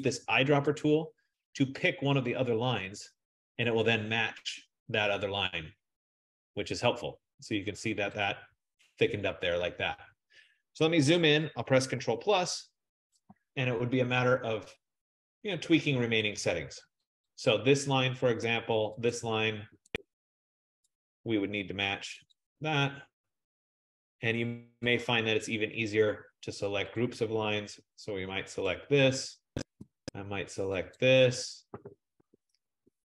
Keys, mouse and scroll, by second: 0.9 click, 2.9 click, 7.9 click, 8.3 click, 12.1 ctrl+=, 12.9 ctrl+=, 14.2-14.8 scroll, 15.1-16.3 scroll, 18.0 click, 19.3 shift+click, 21.6 click, 22.5 click, 25.6 click, 28.7 click.